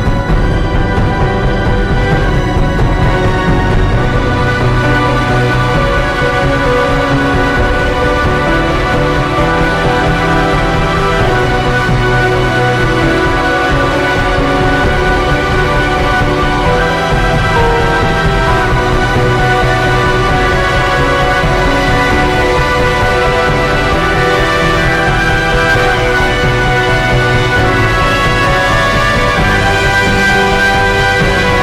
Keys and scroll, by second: 3.5-7.8 typing, 4.1 ctrl+g, 6.3 ctrl+g, 13.7 ctrl+i, 14.3-15.7 typing, 19.0 [, 23.1 ], 23.4 [, 23.5 ], 25.5 ctrl+0, 25.7 ctrl+s, 30.1 ctrl+t.